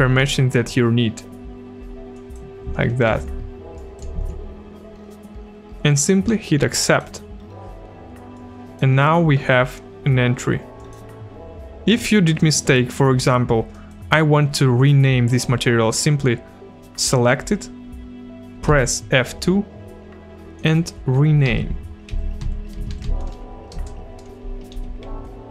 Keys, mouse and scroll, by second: 0.0 ctrl+v, 2.1 click, 3.1 ctrl+c, 3.8 click, 4.2 ctrl+v, 6.8 click, 8.3 click, 10.8 click, 13.7 click, 18.7 F2, 20.6 click, 21.5 Home, 21.9-23.8 typing, 24.7 End, 25.1 Left.